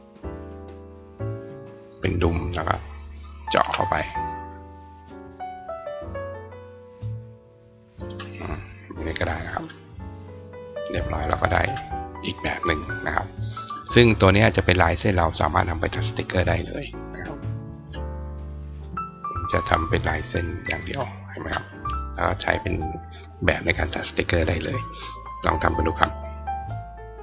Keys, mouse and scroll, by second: 0.7-1.8 drag, 3.4 shift+click, 7.7 click, 8.9 click, 9.4 right click, 10.7 click, 12.8 right click, 15.0 click, 15.8 click, 16.8 click, 17.5 right click, 19.9 right click, 20.7 click, 21.2 click.